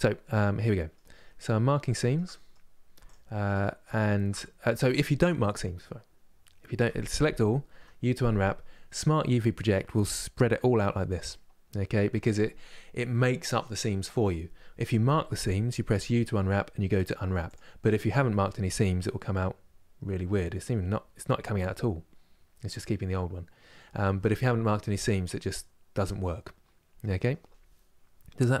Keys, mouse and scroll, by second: 0.0 middle click, 0.9-1.5 scroll up 1, 1.5-2.7 shift+middle drag, 2.7 alt+click, 4.3-6.4 middle drag, 6.4 a, 17.2 u, 22.5-28.6 middle drag.